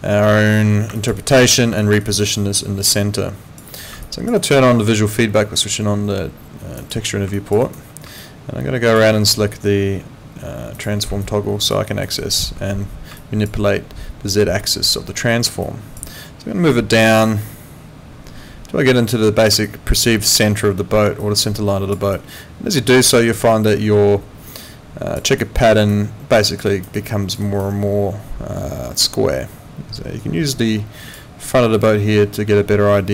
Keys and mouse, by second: 1.0 alt+click, 1.2 alt+right click, 1.8 alt+click, 2.0 alt+right click, 2.4 alt+click, 4.0 alt+click, 4.4 alt+right click, 6.8 click, 7.6 alt+right click, 8.2 alt+click, 10.7 click, 11.2 alt+click, 11.9 alt+right click, 15.6 alt+click, 16.7 click, 19.6 alt+click, 21.2 click, 22.1 alt+click, 25.3 alt+right click, 25.6 alt+middle click, 25.9 alt+click, 26.7 alt+right click, 27.0 alt+click, 27.4 alt+right click, 29.0 click.